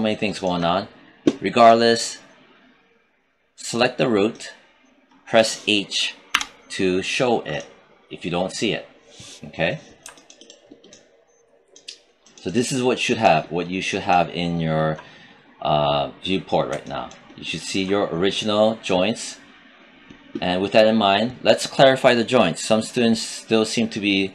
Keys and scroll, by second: 6.2 h.